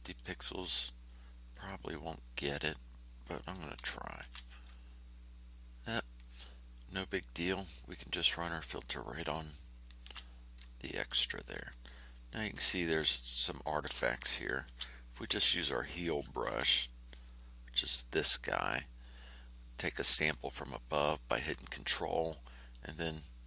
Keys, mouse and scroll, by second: 1.6-3.6 drag, 4.2 ctrl+f, 6.3 click, 7.6-8.8 drag, 10.0 ctrl+f, 11.0 click, 11.9-12.3 ctrl+scroll up 2, 14.6 shift+h, 15.4-16.6 ctrl+shift+scroll down 8, 19.9 ctrl+click, 22.7-23.4 drag.